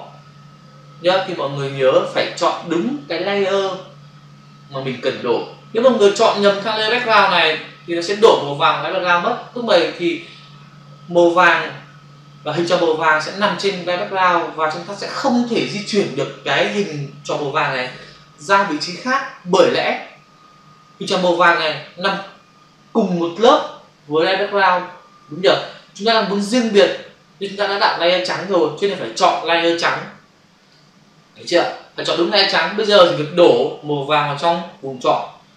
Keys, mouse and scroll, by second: 7.3 click, 30.6 click.